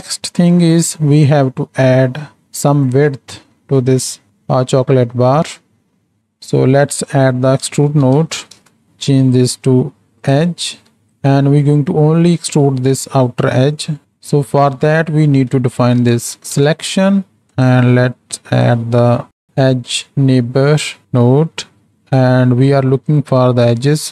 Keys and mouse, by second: 0.2 click, 0.7 click, 1.7 click, 3.6-5.1 drag, 6.0 click, 6.9-8.9 drag, 9.3-10.4 drag, 10.7 click, 11.2 middle click, 13.8 middle click, 14.0-17.5 drag, 18.4-21.9 drag, 22.3 click, 23.1 click.